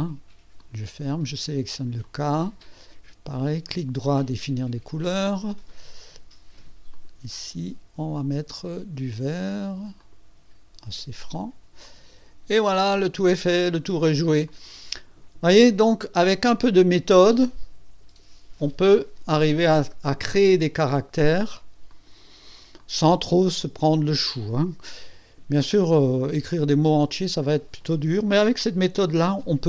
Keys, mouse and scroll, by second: 0.6 click, 2.0 click, 3.6 right click, 4.4 click, 6.9 click, 8.1 click, 10.0 click, 11.3 click, 11.8 click, 12.5-14.2 drag, 14.5-15.3 drag, 15.6-16.4 right drag, 21.9 click, 22.8-24.2 drag.